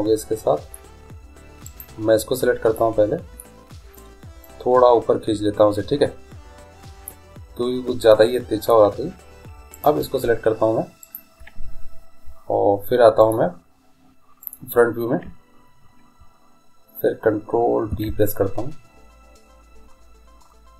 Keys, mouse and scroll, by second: 0.0-2.5 middle drag, 1.7-3.1 right drag, 2.8-5.5 middle drag, 3.1 click, 4.5-6.3 drag, 8.3 middle click, 9.8-10.9 drag, 14.6 click, 18.0 ctrl+b.